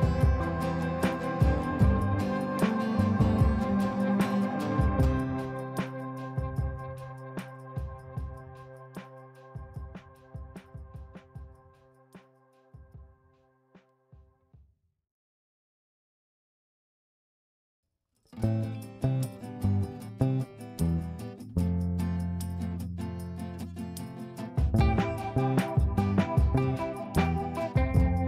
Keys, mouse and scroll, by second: 0.2-2.3 shift+drag, 2.3 click, 3.2-9.9 drag, 9.9-12.4 drag, 13.6 shift+click, 16.0 right click, 18.1 click, 20.4 F2, 20.6-24.7 drag, 24.7 right click, 26.1 click, 27.8 ctrl+z.